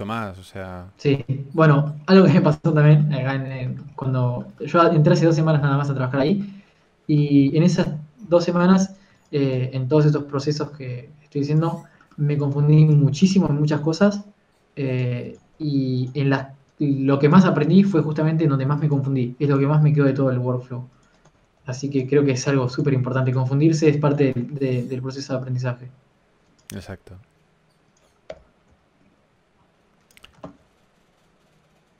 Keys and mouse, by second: 9.1 KP_3, 9.8 right click, 10.6 click, 11.4 r, 13.1-17.0 drag, 16.1 right click, 16.5 r, 18.9 g, 20.1 a, 22.2 Tab, 22.6 z, 23.2 b, 24.9 ctrl+z, 25.7 a, 25.9 c, 27.9 z, 28.1 s, 29.4 o, 29.8 s, 31.2 s.